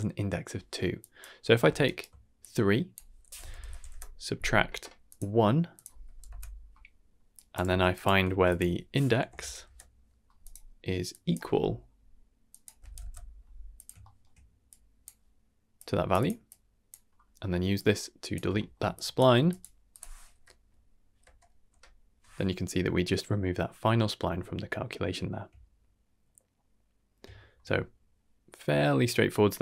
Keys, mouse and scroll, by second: 0.9 click, 1.8 ctrl+right click, 2.3-5.1 drag, 5.7 click, 7.3 drag, 7.6 g, 8.2 shift+a, 11.0 click, 11.5 e, 12.4-13.8 drag, 13.9 shift+middle click, 14.7 click, 15.7-16.0 drag, 16.1 click, 16.4-16.9 drag, 17.7-18.3 drag, 18.5 shift+middle click, 18.9 click, 19.3 g, 19.8 click, 20.3 n, 21.2 n, 21.6 m, 24.1 scroll down 2, 24.3-24.9 shift+middle drag, 27.2 shift+middle drag.